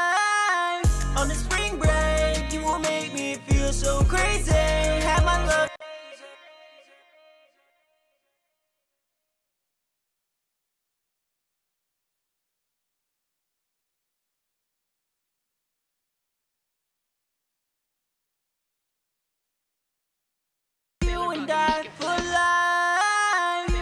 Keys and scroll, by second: 1.4 alt+shift+d, 4.0 Return, 5.0 space.